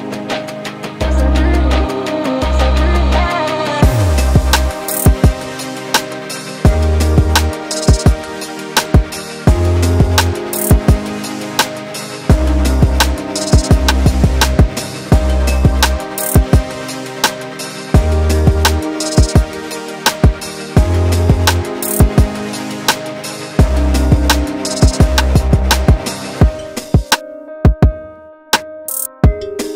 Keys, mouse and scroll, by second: 0.0 middle click, 0.3 Tab, 0.4 scroll up 1, 0.5 middle click, 1.0 click, 1.3 x, 1.5 scroll down 2, 1.5 middle click, 1.5 Tab, 1.6 middle click, 1.7 Tab, 1.8 a, 1.9 alt+n, 2.1 Tab, 2.1 middle click, 2.3 Tab, 2.4 middle click, 2.5 click, 2.5 middle click, 2.7 scroll down 1, 2.7 shift+middle click, 3.5 middle click, 3.5 Tab, 3.6 middle click, 3.7 scroll down 1, 3.9 click, 4.0 scroll up 4, 4.0 middle click, 4.5 Tab, 4.5 middle click, 4.9 click, 5.2 middle click, 5.4 middle click, 5.9 shift+click, 6.1 g, 6.3 shift+click, 6.9 g, 7.2 ctrl+j, 7.3 scroll down 1, 7.3 middle click, 7.8 Tab, 7.9 a, 8.0 alt+n, 8.1 middle click, 8.3 scroll up 3, 8.3 Tab, 8.4 middle click, 9.0 right click, 9.6 middle click, 10.8 click, 11.0 click, 11.2 middle click, 12.3 click, 12.7 middle click, 13.1 middle click, 13.3 Tab, 13.4 click, 13.5 l, 13.7 g, 13.9 middle click, 14.2 scroll up 2, 14.3 middle click, 14.7 l, 15.0 m, 15.3 scroll down 1, 15.4 scroll up 1, 15.5 middle click, 16.4 scroll up 1, 16.5 middle click, 16.5 scroll down 1, 16.6 shift+middle click, 17.1 click, 17.4 g, 17.5 middle click, 17.7 click, 17.8 middle click, 18.2 alt+click, 18.4 scroll up 1, 18.5 scroll down 3, 18.6 middle click, 18.6 scroll up 2, 18.7 shift+middle click, 19.2 click, 19.3 scroll down 1, 19.3 middle click, 19.8-20.4 typing, 20.1 click, 20.9 ctrl+e, 20.9 middle click, 21.5 alt+shift+click, 21.8 middle click, 22.0 alt+shift+click, 22.1 middle click, 22.7 shift+middle click, 22.8 alt+shift+click, 23.1 alt+shift+click, 23.7 shift+middle click, 24.4 shift+click, 24.5 shift+middle click, 24.9 middle click, 25.3 shift+middle click, 25.6 alt+shift+click, 25.7 shift+middle click, 25.9 alt+shift+click, 26.2 alt+shift+click, 26.2 shift+middle click, 26.3 alt+shift+click, 26.6 shift+middle click, 26.9 shift+middle click, 27.1 alt+shift+click, 27.4 shift+middle click, 27.8 alt+shift+click, 28.0 shift+middle click, 28.5 shift+middle click, 28.8 alt+shift+click, 28.9 ctrl+e, 29.1 scroll down 2, 29.1 middle click, 29.4 scroll up 1, 29.5 shift+middle click, 29.7 scroll down 2.